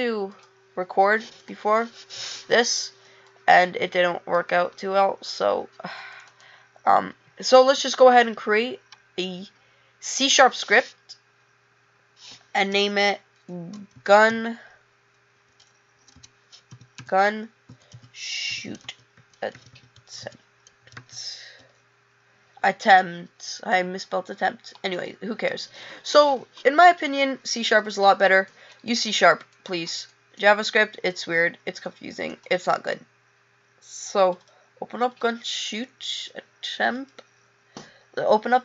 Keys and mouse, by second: 25.7 click, 32.6 click, 34.4 click, 36.2 click.